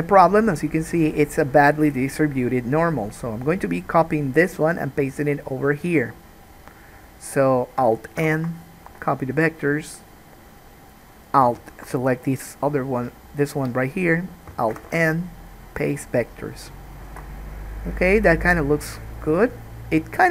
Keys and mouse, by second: 3.2 click, 3.4-19.2 middle drag, 8.3 alt+n, 14.9 alt+n, 17.4 alt+a, 19.2-20.3 drag.